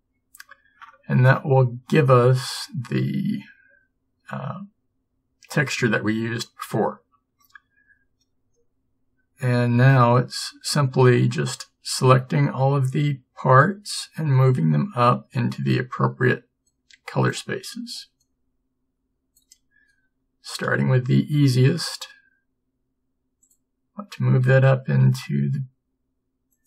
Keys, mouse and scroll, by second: 20.8 b, 20.8 g, 25.1 s.